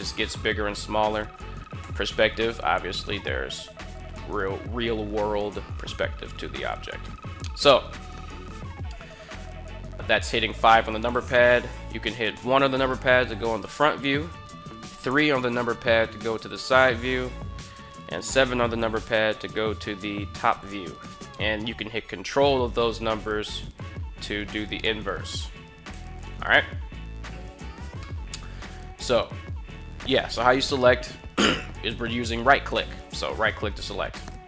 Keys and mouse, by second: 1.5 KP_5, 4.0-4.6 shift+middle drag, 6.8 KP_5, 12.0 KP_1, 14.8 KP_3, 18.0 KP_7, 22.7 ctrl+KP_1, 23.4 ctrl+KP_3, 24.2 ctrl+KP_7, 25.7 KP_1, 27.8-28.4 shift+middle drag, 32.4 right click, 33.9 right click.